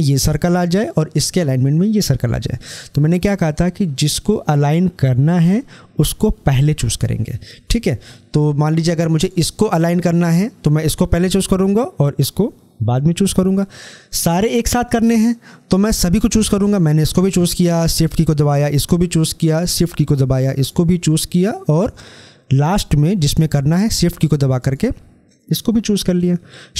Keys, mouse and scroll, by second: 8.6 click, 16.4 click.